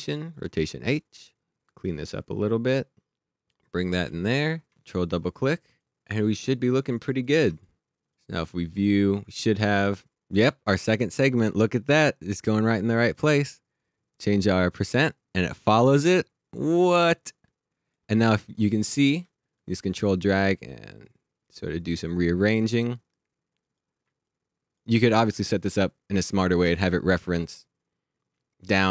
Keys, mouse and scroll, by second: 0.0 click, 1.5 click, 6.1 click, 8.3 click, 13.0 click.